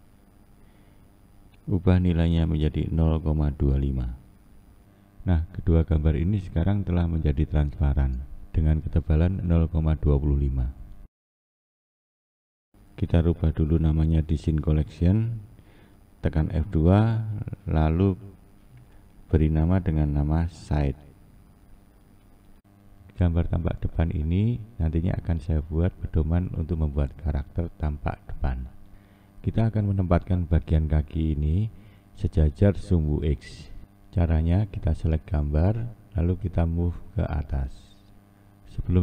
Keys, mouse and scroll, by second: 8.8-9.4 scroll down 3, 9.4 scroll up 1, 9.5 scroll down 2, 9.7-10.1 scroll up 1, 10.1-10.6 scroll down 2, 10.6-12.6 scroll up 3, 13.7 click, 16.4 F2, 23.0-24.0 scroll up 1, 24.0-24.6 scroll down 1, 24.6-25.9 scroll down 1, 25.9-26.3 scroll down 1, 26.3-27.1 scroll up 1, 27.1-29.3 scroll up 1, 29.6-32.0 scroll down 1, 32.0-32.3 drag, 33.0-33.5 scroll up 1, 33.5-35.1 scroll down 1, 35.1-36.0 scroll down 1, 36.0 scroll down 1, 36.2-37.8 drag, 37.8-38.8 scroll up 1, 38.8 click.